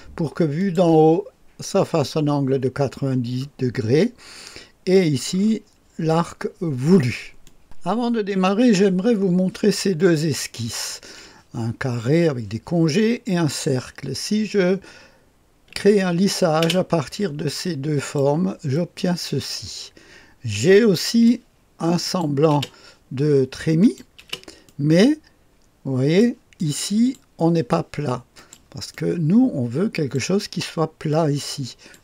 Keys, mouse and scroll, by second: 0.6 click, 7.4 click, 7.6 space, 16.6 space, 18.0 click, 18.7-21.3 drag, 22.0 click, 22.5 typing, 23.8 click, 24.2-27.7 drag, 28.3-30.6 drag, 31.1 click.